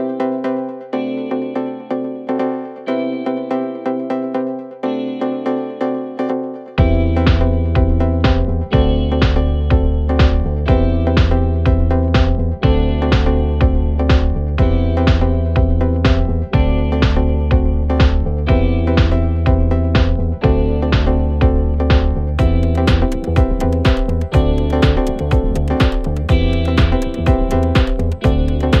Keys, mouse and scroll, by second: 0.1 scroll down 3, 0.3 middle click, 1.2 click, 1.6 KP_7, 2.0-2.7 scroll up 3, 2.7 g, 4.0 g, 4.9 click, 5.5 g, 7.2 s, 10.1 scroll down 1, 10.3-12.1 middle drag, 12.1 g, 13.6 click, 14.1 click, 14.6 KP_3, 14.7 KP_1, 15.0 scroll up 3, 16.0 click, 16.6 g, 17.8 click, 18.0-18.8 scroll down 4, 18.2-18.5 middle drag, 18.8 shift+a, 20.9 x, 21.3 shift+a, 23.3 scroll down 1, 23.5 r, 28.0 KP_3, 28.5-28.8 scroll up 3.